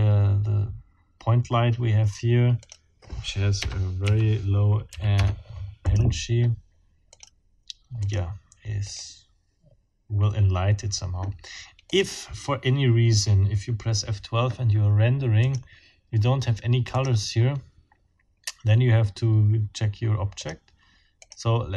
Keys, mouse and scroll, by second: 2.6 scroll up 2, 3.6 KP_0, 4.0 KP_Decimal, 4.9 KP_3, 5.1 KP_Enter, 5.8-6.1 scroll up 2, 7.1 scroll up 2, 8.0-8.3 scroll up 2, 8.9 scroll up 2, 11.9 scroll up 2, 15.4 click, 16.9 click, 20.4 click, 21.2 click.